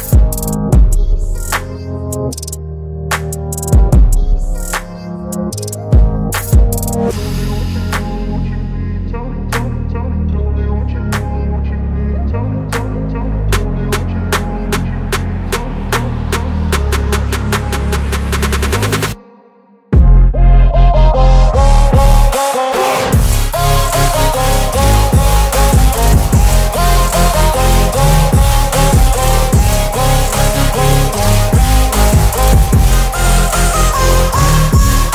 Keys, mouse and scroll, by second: 4.4-6.9 alt+drag, 10.5 right click, 11.1 click, 13.7 click, 16.9 ctrl+t, 18.9-20.2 shift+drag, 20.9 ctrl+z, 21.9-23.2 drag, 28.0-30.6 alt+drag, 33.3 ctrl+g, 33.9 t.